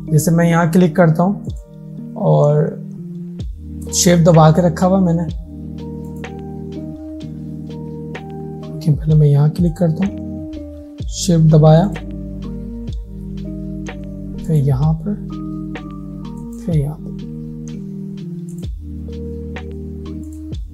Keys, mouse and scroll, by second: 1.5 click, 3.9 shift+click, 6.1 shift+click, 14.5 shift+click.